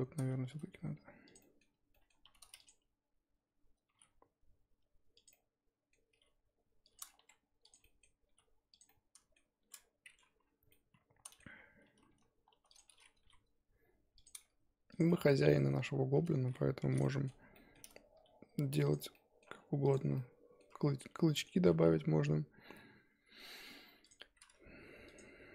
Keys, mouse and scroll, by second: 0.4 g, 1.4 middle click, 2.2 2, 2.6 click, 3.4-3.9 scroll up 2, 3.9 g, 5.3 middle click, 6.1 g, 7.2 1, 7.6 click, 7.8 middle click, 8.3 g, 8.9-11.8 middle drag, 11.8 2, 12.7 click, 13.1 g, 14.9 click, 15.1-16.4 middle drag, 16.4 g, 17.0-18.1 middle drag, 18.1 r, 19.0 Tab, 19.1 middle click, 19.6-20.1 scroll down 2, 19.8 click, 20.1 middle click, 20.7-21.0 scroll up 4, 21.3 middle click, 21.8 shift+a, 25.0-25.5 drag.